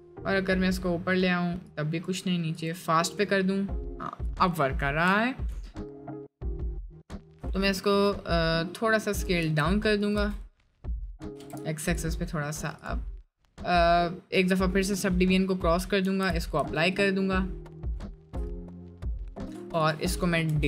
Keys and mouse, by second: 4.7 middle drag, 5.1 F4, 5.7 middle click, 6.7 middle click, 7.4 s, 8.3 middle click, 8.9 middle click, 9.4 s, 10.2 s, 10.9 middle click, 11.3 s, 16.0 ctrl+a, 16.6 Tab, 17.0 middle click, 17.4 middle click, 18.2 shift+middle click, 18.5 middle click, 19.6 Tab, 20.4 Delete.